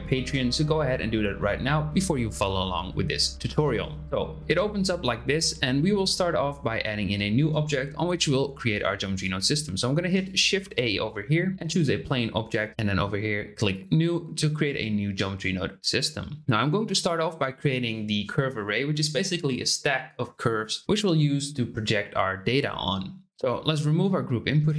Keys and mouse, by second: 10.2 click, 10.5 shift+a, 13.7 click, 23.6 x.